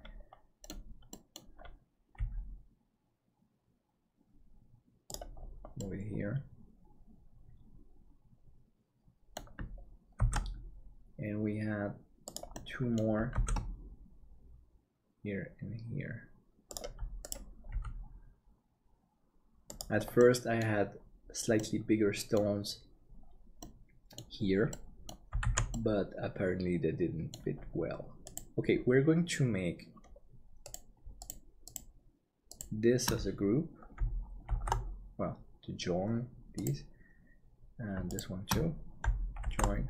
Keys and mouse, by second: 1.2 middle click, 2.2 g, 5.8-9.3 middle drag, 10.2 shift+d, 12.5 middle click, 13.3 shift+d, 17.7 g, 20.2 middle click, 21.5 middle click, 23.8 middle click, 24.8 middle click, 25.5 alt+a, 25.8-27.3 middle drag, 34.5 ctrl+j, 39.5 ctrl+j.